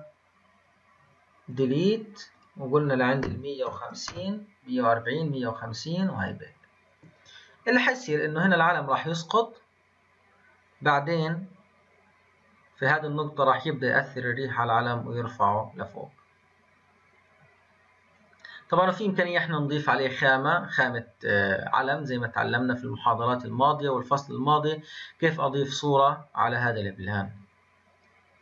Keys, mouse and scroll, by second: 2.3-5.3 drag.